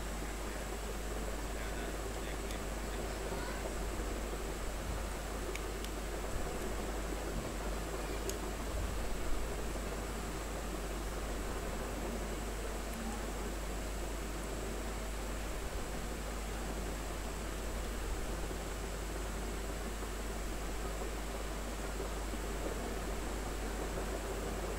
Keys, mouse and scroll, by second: 0.7 r, 0.9 click, 2.0 b, 2.5 ctrl+space, 2.7 ctrl+click, 3.0 ctrl+space, 3.4 click, 3.7 space, 4.9 click, 5.3 b, 5.8 space, 6.2 click, 6.4 space, 6.7 r, 6.9 click, 7.9 b, 8.2 space, 8.4 ctrl+click, 8.8-12.8 drag, 12.8 space, 13.0 click, 13.3 space, 13.9-17.5 drag, 17.5 space, 18.1-21.6 drag, 21.6-23.5 drag, 23.5 click, 24.0 space, 24.1 click, 24.5 space.